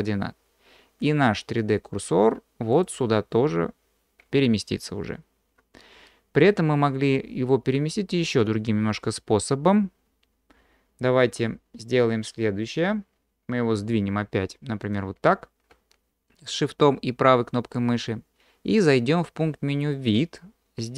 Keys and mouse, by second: 14.9 shift+click, 20.1-20.9 drag.